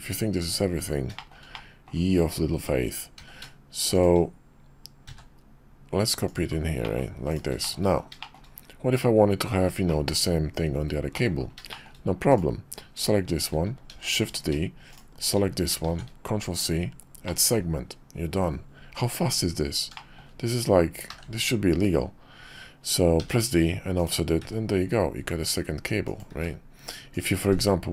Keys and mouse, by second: 1.2-7.4 shift+middle drag, 7.6 shift+middle click, 8.2 shift+middle click, 11.1 middle click, 11.7 shift+middle click, 12.3 click, 13.9 shift+d, 14.9 shift+click, 15.8 alt+shift+c, 17.3-27.9 drag.